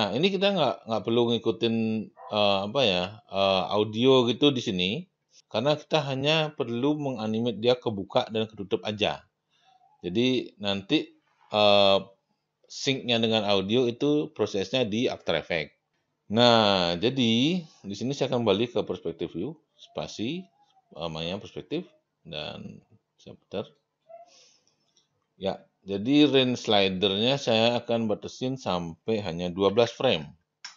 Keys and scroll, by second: 18.1 space, 30.6 Return.